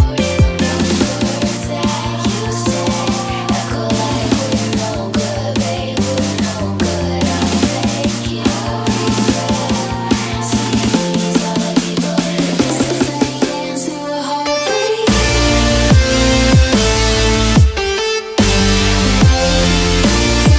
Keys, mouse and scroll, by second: 0.7-3.0 drag, 5.8 click, 7.2-8.7 typing, 13.0 click, 13.6 click, 15.0 click, 16.9 click, 19.9 click.